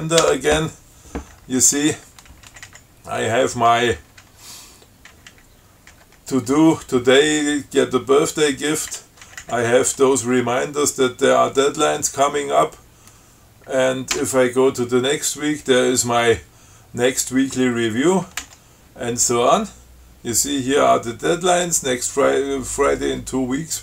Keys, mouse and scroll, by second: 2.7 Down, 3.4 Down, 4.2 Up, 5.4 Down, 6.2 Up, 9.5 Down, 14.4 f, 18.6 f.